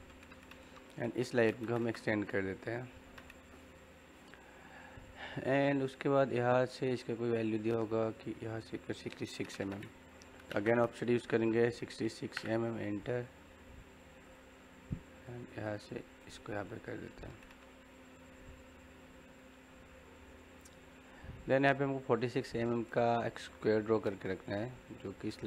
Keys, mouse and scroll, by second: 0.9-1.8 typing, 2.4 click, 10.2 o, 10.4 space, 14.2 click, 16.6-19.4 middle drag.